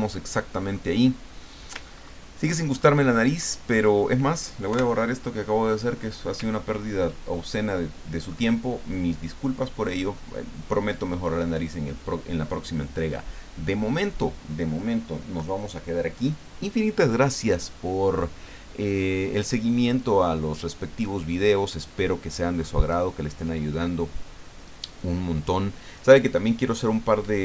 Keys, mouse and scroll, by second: 0.3 ctrl+middle click, 1.8-2.2 ctrl+scroll up 2, 2.8 ctrl+middle click, 3.8 click, 4.7 Delete, 6.6-6.9 ctrl+scroll down 2, 7.5-8.5 ctrl+drag.